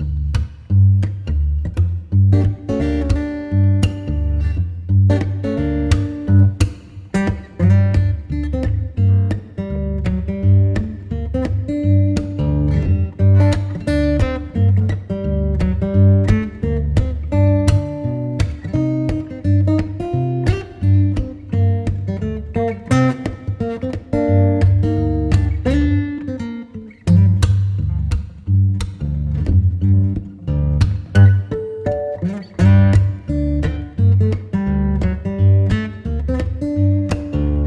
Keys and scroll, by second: 0.0 super+w, 1.2 v, 7.8 super+t, 15.0 space, 16.0 alt+space, 19.3 alt+shift+Return, 20.3 Return, 29.3 space, 32.1 b.